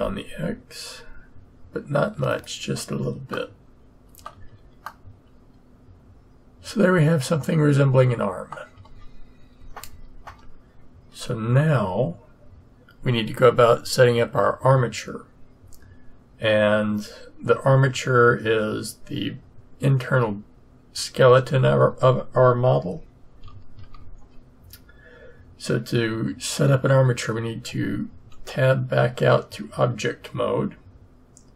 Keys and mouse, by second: 3.3-4.8 middle drag, 4.3 a, 10.2 KP_3, 23.7 Tab.